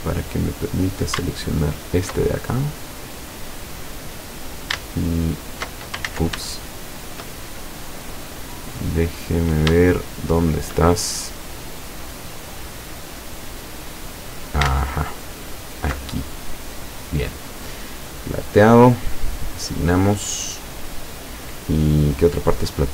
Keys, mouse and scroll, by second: 1.5 alt+shift+right click, 2.5-3.4 alt+shift+middle drag, 3.6-4.6 middle drag, 5.1 alt+shift+right click, 6.1 ctrl+alt+shift+z, 6.6-7.4 ctrl+shift+middle drag, 7.6 shift+scroll up 1, 8.0-10.9 middle drag, 10.9-11.3 shift+scroll up 1, 12.9-14.3 middle drag, 15.5 alt+shift+right click, 16.2-16.6 alt+shift+scroll down 3, 16.8 middle click, 18.5 click, 19.5 click, 21.1-21.4 scroll down 2, 22.7-22.9 middle drag.